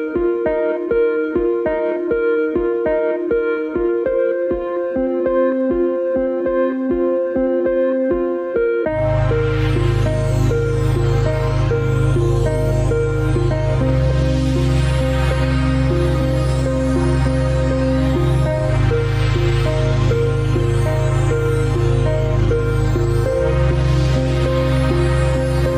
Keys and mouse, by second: 12.7-14.1 right drag, 14.6 Tab, 15.0 Tab, 15.5-16.2 middle drag, 17.1 click, 19.0-20.4 middle drag, 24.9-25.4 middle drag.